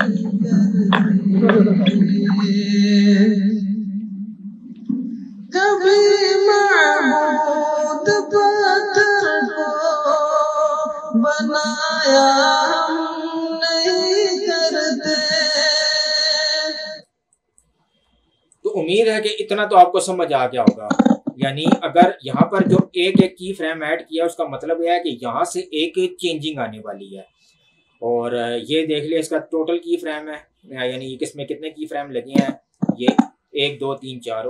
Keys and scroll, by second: 17.0 space.